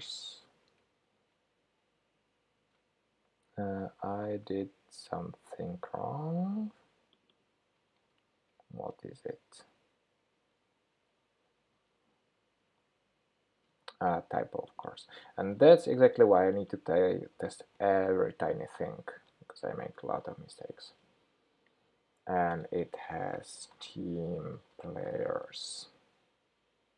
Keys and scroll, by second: 8.1 super+x, 12.7 super+v, 15.5 super+c, 17.6 super+v, 20.8 super+Left.